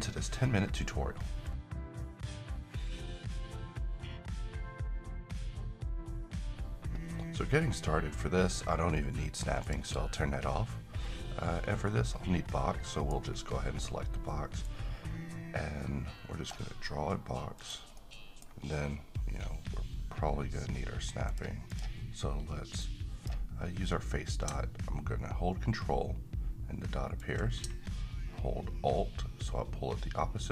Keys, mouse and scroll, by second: 12.5-13.1 middle click, 13.2 scroll up 1, 14.6-16.5 drag, 18.3 middle drag, 21.3-27.2 drag, 23.1-23.5 drag, 27.2-30.5 ctrl+drag.